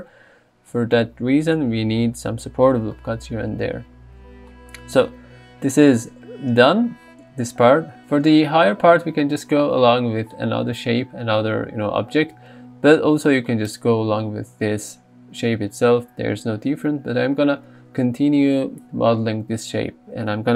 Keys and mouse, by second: 0.7 Tab, 13.0 Tab.